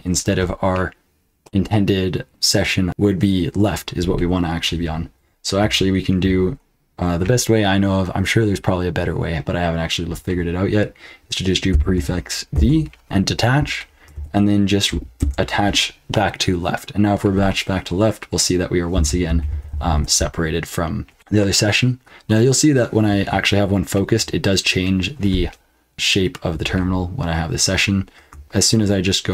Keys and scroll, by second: 11.7 ctrl+b, 12.5 d, 14.1 ctrl+p, 15.2 Return, 18.7-20.4 typing.